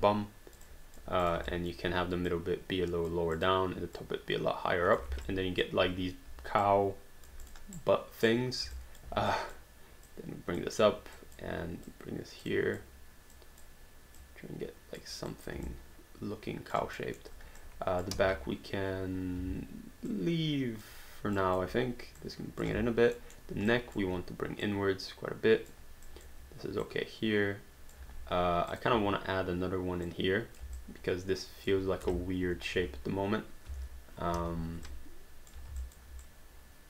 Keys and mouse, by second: 1.5 alt+click, 3.4 click, 5.1 alt+d, 5.3 alt+click, 6.7 alt+click, 7.4 click, 7.8 right click, 8.8 alt+click, 9.3 click, 11.2 click, 15.3 click, 15.7 alt+click, 17.0 alt+middle click, 17.6 click, 18.2 r, 19.4 w, 20.1 click, 21.4 click, 23.2 alt+middle click, 23.7 click, 26.1 click, 28.7 click, 30.1 click, 30.8 alt+click, 32.5 click, 32.7 r, 33.7 w, 34.4 r, 34.9 click, 35.9 alt+click.